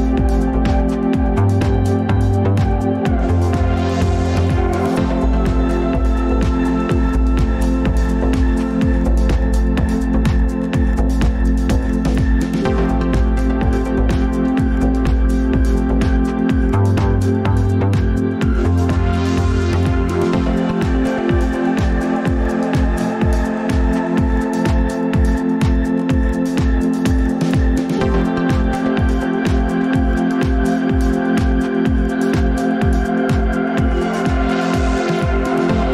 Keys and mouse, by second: 0.0 n, 10.2 e, 17.5 Tab, 19.6 click, 25.2-25.6 shift+middle drag, 26.4 Tab, 28.6 alt+z, 30.1 1, 31.6-32.0 drag.